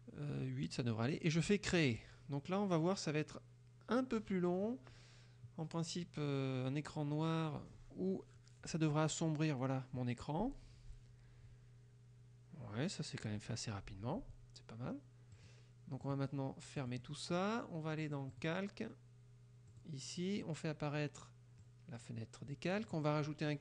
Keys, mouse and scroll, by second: 1.8 click, 13.2 click, 14.2 click, 15.5 click, 18.0 click, 19.7 click, 21.7 click, 22.9 click.